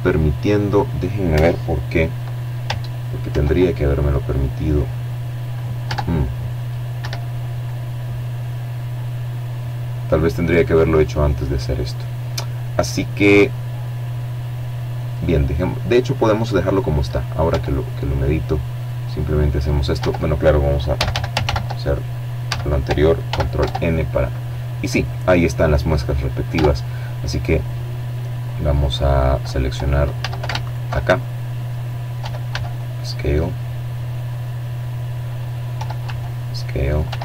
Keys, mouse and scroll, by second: 0.9 ctrl+r, 3.5 Tab, 3.9 middle click, 4.6 Escape, 5.1-8.3 middle drag, 8.9-13.2 middle drag, 15.0 Tab, 16.4 click, 17.0 click, 17.6 Tab, 18.5 a, 19.0 ctrl+n, 20.0 a, 20.8 ctrl+n, 21.2 ctrl+Tab, 22.3-23.9 middle drag, 24.1 Tab, 27.8 a, 28.2 alt+shift+right click, 28.8-29.8 alt+shift+middle drag, 29.8 e, 30.2 s, 33.0 click, 33.3 e, 33.6 s, 34.4 click, 34.7 e, 34.9 s, 35.5 click, 36.5 alt+m, 37.1 alt+click.